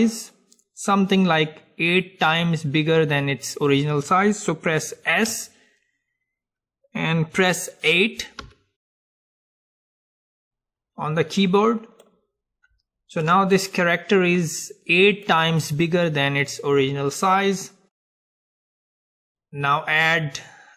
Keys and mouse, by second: 5.3 s, 12.1-15.7 middle drag, 19.2-20.7 drag.